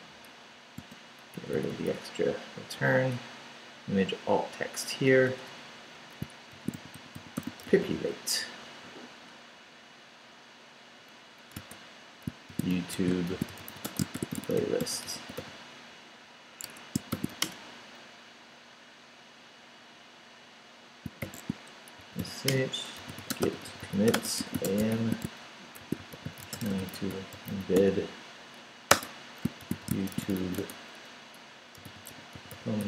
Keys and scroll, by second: 0.3 BackSpace, 0.8 space, 1.3 Right, 2.8 i, 3.1 BackSpace, 5.1 BackSpace, 6.2-8.2 typing, 8.6 Down, 9.4 Up, 11.6-15.2 typing, 16.7 Escape, 16.9-17.8 typing, 21.2-32.8 typing.